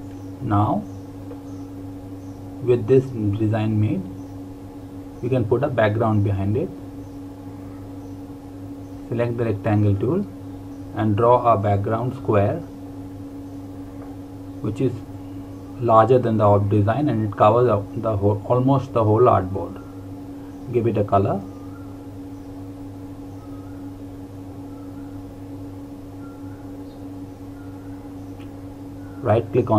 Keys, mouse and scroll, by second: 4.5 ctrl+g, 5.2 click, 8.9 click, 11.8 ctrl+Num_Lock, 12.2 ctrl+KP_0, 14.9 click, 22.1 click, 25.6 click.